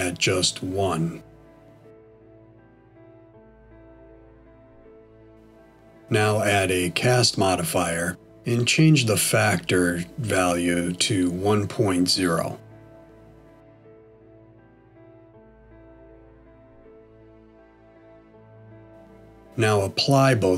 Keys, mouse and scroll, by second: 4.3 click, 10.2 middle click, 12.5 click, 16.2 middle click.